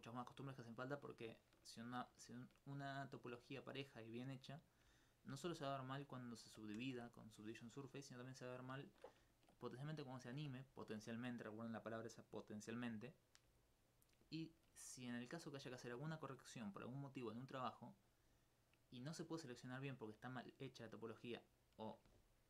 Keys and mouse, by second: 0.1 alt+click, 0.7 alt+click, 5.5 alt+click, 6.8 ctrl+x, 8.4 middle click, 14.2 middle click, 18.2-19.4 middle drag, 20.8 alt+click, 21.0 alt+click.